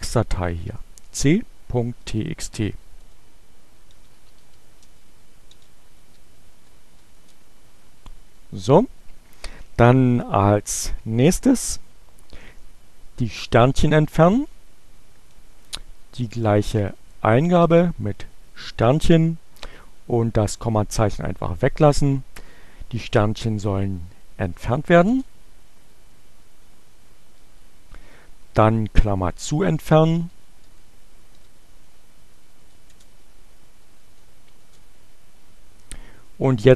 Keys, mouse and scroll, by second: 0.0-1.9 typing, 2.9 Return, 3.2-6.3 typing, 13.0 Up, 14.2 Left, 14.4 Up, 15.3 Left, 16.4 Delete, 18.3 Right, 20.7 Delete, 23.4 Return, 25.8 Up, 26.5 Return, 27.4 Up, 28.3 Up, 28.7 Left, 30.0 Right, 30.7 Delete, 31.4 shift+9, 31.8 Return, 33.5 Up, 34.2 Return.